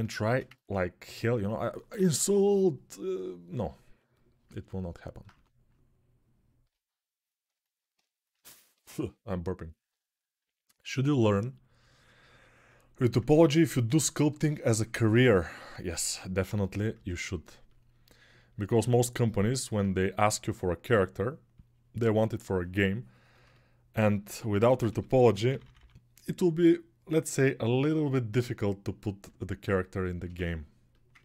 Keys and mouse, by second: 1.7 p, 1.9 [, 2.1 [, 2.2 [, 5.1 1, 8.1-15.4 alt+drag, 16.4 3, 17.0-31.2 ctrl+alt+drag, 24.6-25.5 typing.